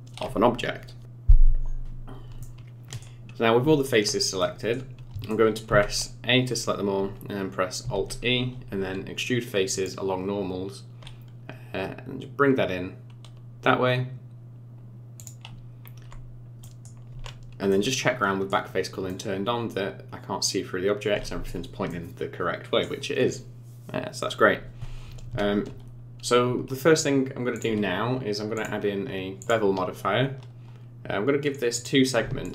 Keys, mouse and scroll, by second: 2.4 middle click, 3.6 Tab, 4.4 middle click, 5.3 middle click, 5.7 a, 7.9 alt+e, 16.6 middle click, 17.1 Tab, 17.7 middle click, 19.1 middle click, 21.9 middle click, 27.5 click, 28.6 click, 31.7 click, 32.4 shift+click.